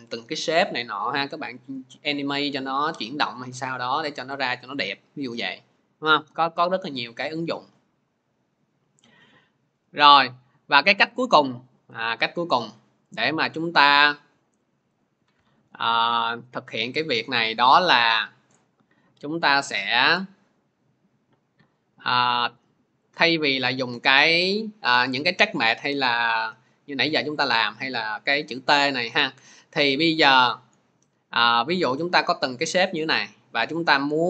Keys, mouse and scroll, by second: 7.2 click, 9.1 ctrl+z, 9.6 ctrl+z, 11.4 ctrl+z, 11.9 click, 14.8 click, 18.4 click, 22.3 click, 23.0 click, 24.4 click, 25.8 click, 32.4 click, 33.0 click.